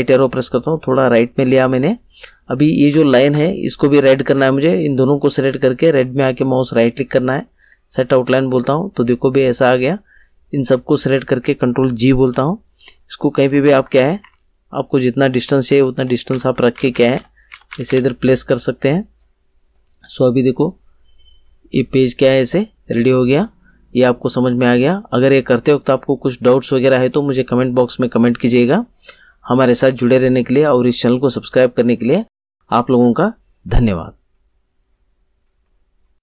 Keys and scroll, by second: 12.1 ctrl+g, 13.4 Up, 14.2 Down, 15.6 Left.